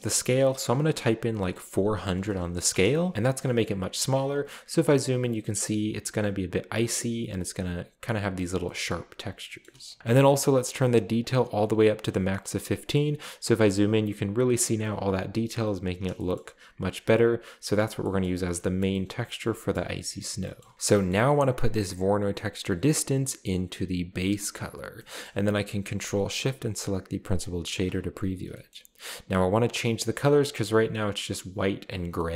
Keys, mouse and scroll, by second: 1.4-1.9 typing, 2.7 Return, 3.1-4.1 shift+scroll up 1, 3.4-4.4 shift+middle drag, 4.0 typing, 4.6 scroll up 1, 5.3 scroll up 1, 7.6 scroll down 2, 8.6 shift+middle drag, 9.0 scroll down 2, 9.4 shift+middle click, 9.8 middle click, 9.8 scroll down 1, 11.2-12.4 drag, 12.8-13.6 middle drag, 13.0-14.0 scroll up 2, 15.5-16.5 scroll down 2, 16.4 shift+middle click, 16.5-17.8 scroll up 1, 17.8 scroll down 1, 18.0-18.6 shift+middle drag, 18.6-19.1 scroll up 2, 18.8 middle click, 19.4 middle drag, 19.8-20.2 shift+middle drag, 19.8-20.3 scroll up 3, 20.3-21.3 scroll down 2, 21.3 scroll up 1, 23.0-24.7 drag, 25.0 middle click, 25.1-25.4 scroll up 1, 27.3 ctrl+shift+click, 28.5-29.6 middle drag, 29.2-31.7 scroll up 3, 32.2 middle click.